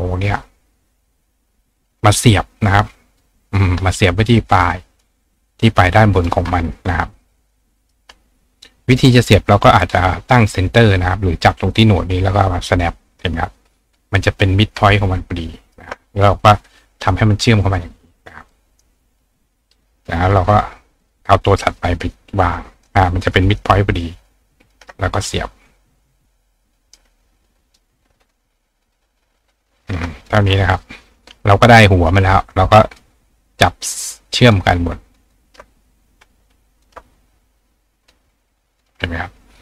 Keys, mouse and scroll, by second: 1.0-3.2 drag, 3.5 click, 4.6 click, 4.9 click, 5.7 click, 7.5 click, 8.9 click, 9.5 click, 11.5-12.8 drag, 14.8 ctrl+click, 18.4 click, 18.7 right click, 20.3 click, 21.6-22.9 drag, 22.7-26.9 right drag, 24.3 ctrl+click, 26.2-27.8 drag, 28.3-29.9 ctrl+drag, 30.2-32.2 drag, 32.9 shift+click, 33.8 shift+click, 34.4 shift+click, 35.3 shift+click, 36.7 shift+click, 38.0 click, 38.8-39.6 drag.